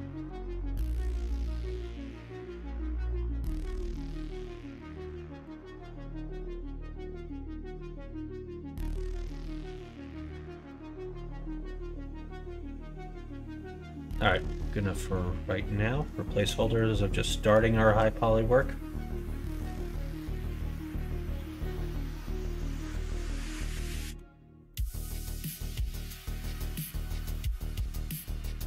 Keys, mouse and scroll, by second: 0.4 Tab, 1.0 click, 1.5 Tab, 1.7 middle click, 2.3 2, 3.0 click, 3.7 click, 4.0 middle click, 5.3 click, 5.6 q, 7.1 click, 7.6 Tab, 8.9-10.0 drag, 10.5 click, 11.0-13.6 middle drag, 14.1 middle click, 14.9 middle click, 15.8 middle click, 16.1 shift+middle click, 16.5 middle click, 17.0 middle click, 17.6 shift+middle click, 21.7 middle click, 22.3-24.1 middle drag, 24.6 middle click, 25.5 middle click, 26.9-28.5 middle drag.